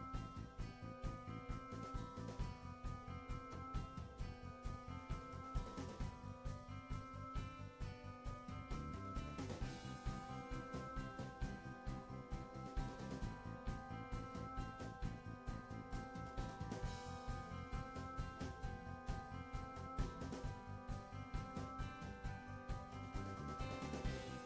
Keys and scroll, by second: 7.0 Delete, 10.0 Delete, 13.4 Delete.